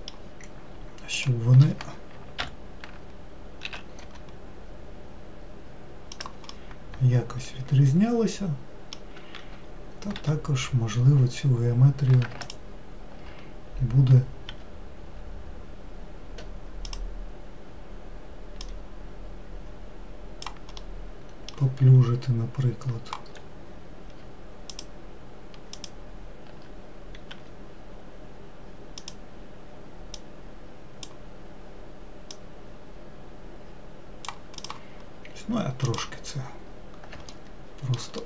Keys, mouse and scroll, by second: 1.6 click, 2.9 ctrl+l, 4.1 s, 7.0-10.0 middle drag, 10.6 2, 11.4-12.8 scroll up 1, 12.8 scroll up 1, 12.9 alt+click, 15.0 r, 19.1 click, 21.3-23.8 middle drag, 23.8-24.7 scroll up 4, 25.2 alt+click, 26.2 alt+click, 27.8 r, 30.7 click, 32.8-34.1 drag, 35.1 click, 35.5-36.3 scroll down 5, 36.3 click, 37.8 alt+middle click.